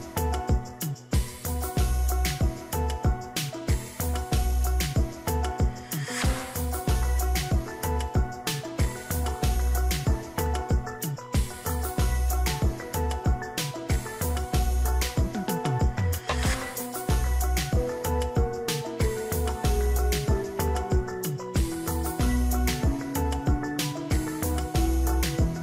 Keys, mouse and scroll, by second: 1.9 ctrl+j, 2.5 ctrl+click, 5.1 ctrl+j, 5.9 ctrl+click, 7.0 ctrl+z, 8.7-10.5 scroll up 1, 13.4 ctrl+j, 14.1 ctrl+click.